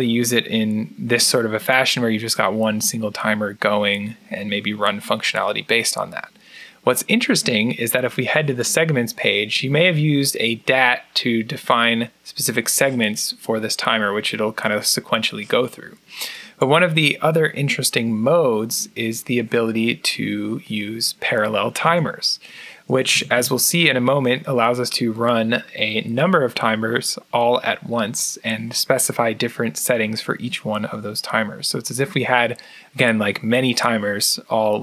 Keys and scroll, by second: 21.7 Tab, 22.7 Tab, 23.0 Tab, 23.2 Tab.